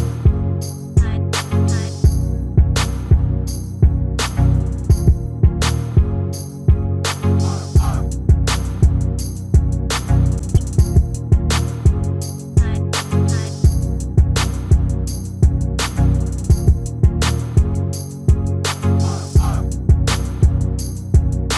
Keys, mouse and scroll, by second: 1.1-2.8 middle drag, 5.2 g, 9.6-12.1 middle drag, 14.6 g, 18.0 middle click.